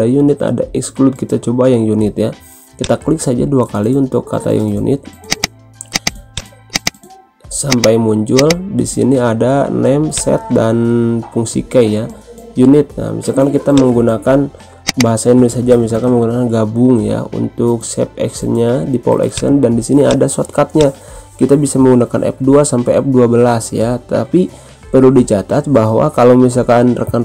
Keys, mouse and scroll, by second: 2.7 click, 5.2 click, 6.0-13.0 drag, 13.7-16.9 drag, 16.7-18.0 typing, 19.2 click.